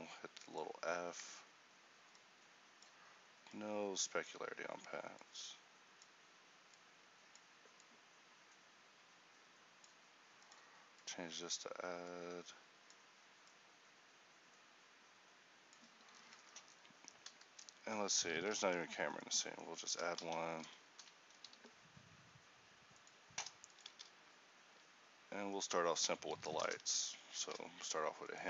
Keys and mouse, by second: 16.4 a, 18.4 shift+a, 21.0 ctrl+a, 21.6 g, 24.0 shift+a, 26.4 r.